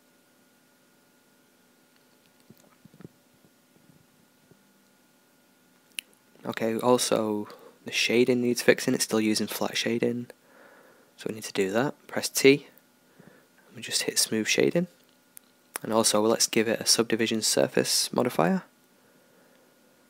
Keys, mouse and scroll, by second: 5.2-7.0 drag, 6.4 KP_0, 7.1-10.5 drag, 10.5 middle click, 10.7 click, 10.8-12.2 middle drag, 14.6 click, 14.6 t, 16.5-19.4 drag.